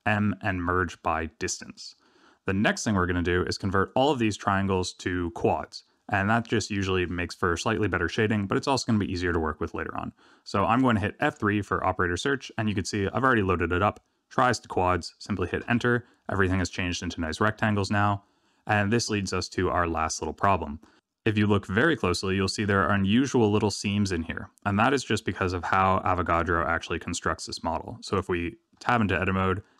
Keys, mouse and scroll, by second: 11.2 F3, 19.2 middle click, 20.3 Tab, 20.8 middle click, 21.0 middle click, 28.0 click, 28.7 Tab.